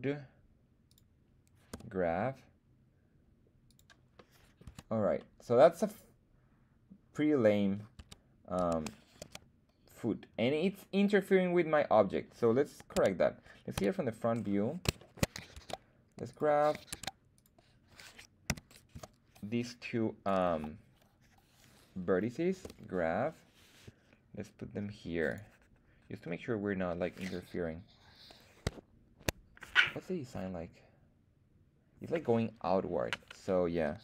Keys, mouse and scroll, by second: 0.9 click, 1.7 g, 3.6 click, 4.1 middle click, 4.6 Tab, 5.2-7.8 middle drag, 8.0 Tab, 8.6 Tab, 9.2 z, 10.4 middle drag, 11.7-12.4 middle drag, 12.9 Tab, 13.7 KP_1, 14.4-14.8 scroll up 2, 15.0 shift+middle click, 15.5 ctrl+Tab, 16.9 ctrl+Tab, 18.5 a, 18.9 c, 20.4 Escape, 22.6 g, 25.2 click.